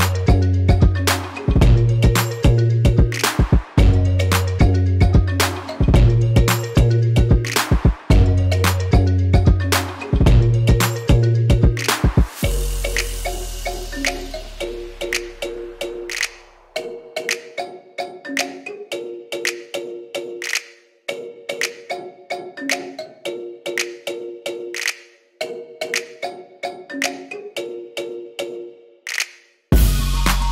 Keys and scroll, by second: 11.6-12.5 typing, 25.5 super+d.